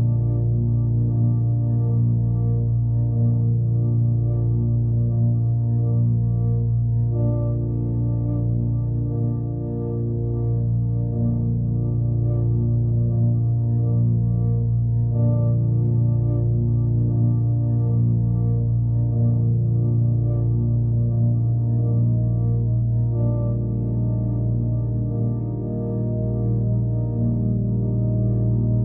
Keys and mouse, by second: 0.9-2.1 alt+drag, 2.5-3.7 alt+drag, 4.4-6.4 alt+drag, 7.7 click, 9.2 click, 9.7 alt+click, 11.2-13.7 alt+drag, 14.8 alt+click, 15.6 alt+click, 16.6-18.0 drag, 18.5-20.2 drag, 20.6-21.7 alt+drag, 22.2 alt+click, 26.0-27.1 alt+drag, 27.4-28.4 alt+drag, 28.7-28.8 alt+drag.